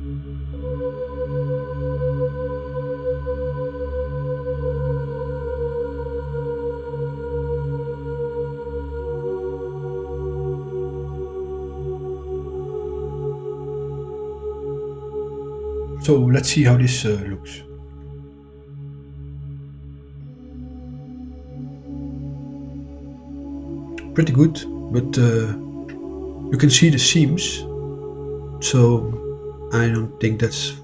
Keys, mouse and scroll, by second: 6.9 click, 7.7-11.0 drag, 12.2 click, 12.7-15.3 drag, 22.1 click, 23.3-26.9 middle drag, 27.8-28.1 middle drag, 28.9-30.5 middle drag.